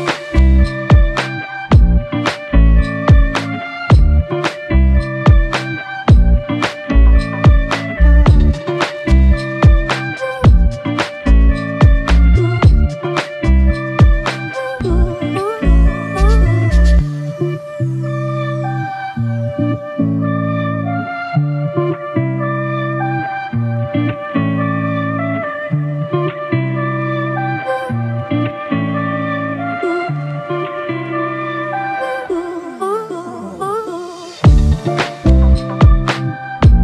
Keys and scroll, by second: 2.2 scroll up 1, 5.0 ctrl+scroll down 1, 15.3 ctrl+scroll up 1, 19.9-20.7 scroll down 2, 33.8 scroll up 1, 35.2 scroll down 3, 35.6 scroll up 1.